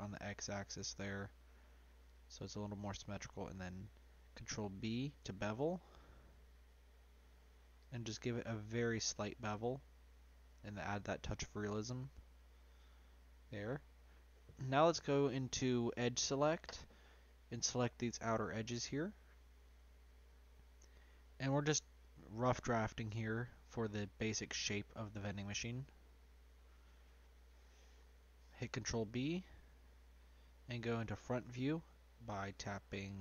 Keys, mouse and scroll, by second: 2.5-4.0 middle drag, 4.0 b, 6.4 ctrl+b, 10.9-13.9 middle drag, 14.8 2, 15.7 click, 18.1 shift+click, 18.7-20.0 scroll down 4, 20.0 shift+click, 20.6 shift+click, 21.1-22.8 middle drag, 22.8 shift+click, 23.3 shift+click, 23.8-25.7 middle drag, 25.7 shift+click, 26.6 shift+click, 27.2 middle click, 27.9 ctrl+b.